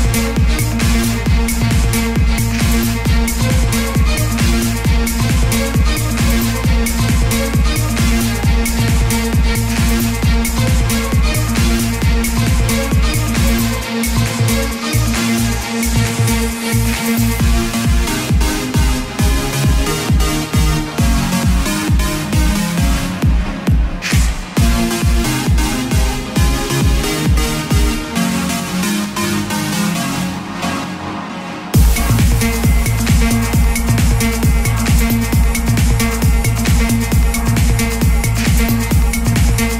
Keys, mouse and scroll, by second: 6.6-7.0 typing, 10.1 click, 10.8 ctrl+d, 11.5-19.0 drag, 21.2 ctrl+d, 22.6 click, 24.6-25.1 typing, 27.2 click, 29.3 ctrl+z, 30.4-35.2 drag, 38.8 ctrl+d.